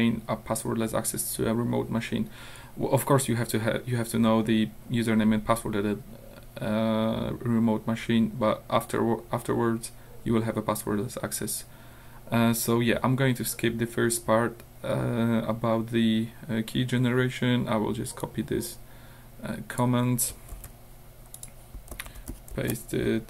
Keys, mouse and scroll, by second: 12.6 scroll up 2, 18.2-20.0 drag, 20.6 ctrl+c, 21.4 click, 22.0 ctrl+v.